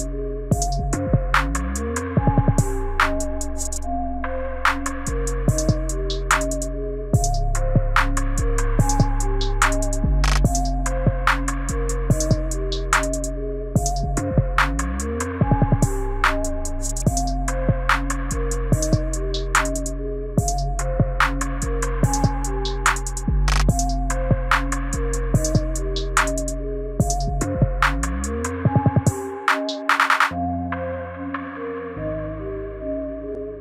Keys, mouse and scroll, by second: 0.4 click, 3.2 click, 6.4 KP_7, 7.3 click, 7.8 click, 12.9 click, 13.9-16.0 scroll down 26, 16.0 scroll down 2, 16.3 click, 19.1 click, 25.1-27.6 scroll up 27, 27.6 click, 29.2 click, 30.3 click, 31.1-32.0 scroll down 13, 32.6 click, 32.6-33.4 scroll down 3.